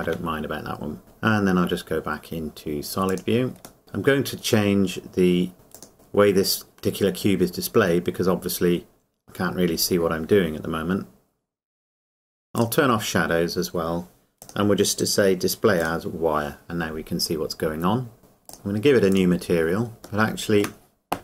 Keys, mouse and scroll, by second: 0.0 Tab, 3.0 z, 3.0 click, 3.8-4.3 scroll down 1, 5.7 click, 8.2 scroll down 1, 12.6 click, 18.5 click, 20.1 scroll down 1, 20.5 shift+middle click.